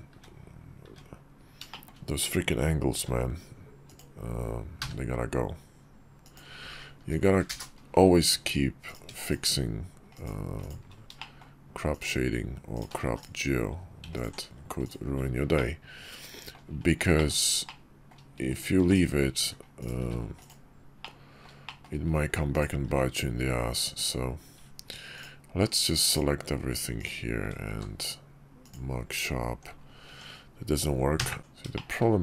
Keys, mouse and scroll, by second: 0.6 `, 1.4 shift+click, 2.7 k, 8.0 Tab, 8.6 click, 9.0-10.0 shift+drag, 10.3 shift+click, 10.9 shift+middle click, 11.6 shift+click, 12.5 shift+click, 12.8 x, 13.9 alt+click, 14.1 x, 15.3 middle click, 16.2-16.8 scroll down 1, 16.9 shift+middle click, 17.4 middle click, 18.2 click, 18.5 x, 19.5 click, 19.7 x, 20.7 middle click, 21.4 shift+middle click, 22.2 click, 22.6 x, 24.8 ctrl+click, 25.8 ctrl+click, 27.4 q, 29.2 Tab, 30.9 Tab, 30.9 3, 31.5 shift+click.